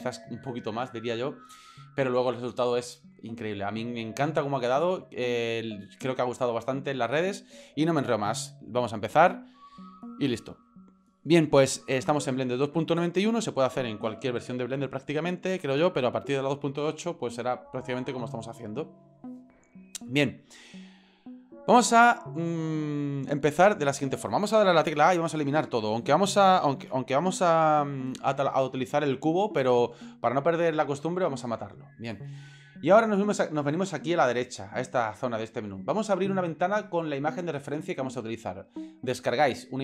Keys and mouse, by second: 26.4 click, 26.8 a, 27.6 Delete.